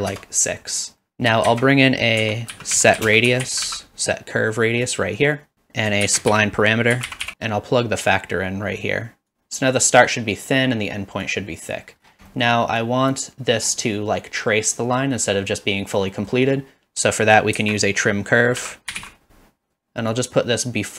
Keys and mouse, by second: 1.5 shift+a, 2.5 s, 5.5 drag, 6.1 shift+a, 8.2-9.3 drag, 11.4 click, 13.0 click, 16.1 middle click, 17.6 shift+a, 20.2 click.